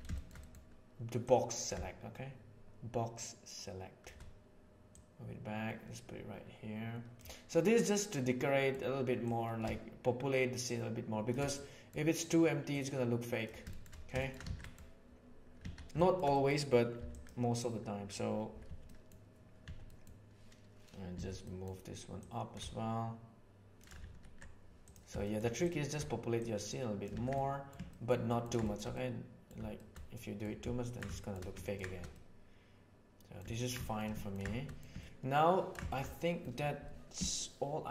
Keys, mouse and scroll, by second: 0.1 middle click, 0.4 middle click, 1.3 click, 1.5-4.1 shift+middle drag, 5.0-6.5 middle drag, 6.5 right click, 7.5-8.7 middle drag, 9.3-10.3 right drag, 11.5 middle click, 12.7 right click, 13.7 shift+middle drag, 14.1 shift+middle click, 14.5 alt+a, 14.6 middle click, 15.9 shift+middle click, 16.3 middle click, 16.9 b, 18.6 b, 19.6 b, 21.1 z, 21.4 middle click, 22.3-23.8 shift+drag, 24.1 alt+a, 25.2 shift+middle click, 26.4 right click, 26.8 click, 27.3 middle drag, 27.9 middle click, 28.3 ctrl+middle click, 28.6 shift+middle click, 28.9-29.4 middle drag, 29.7 shift+middle drag, 30.1 middle click, 30.8 ctrl+middle click, 31.1 shift+middle click, 31.6 ctrl+middle click, 32.1-33.3 middle drag, 33.5 ctrl+middle click, 33.8 shift+middle click, 34.1 ctrl+middle click, 34.7 middle click, 34.9-35.7 ctrl+middle drag, 35.9 shift+middle click, 36.1 middle click.